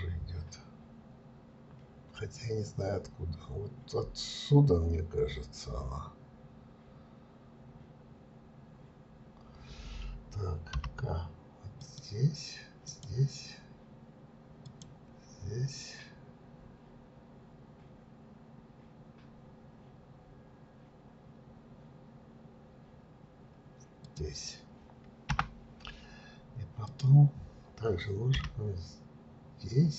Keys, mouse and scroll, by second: 26.8 click, 28.3 k.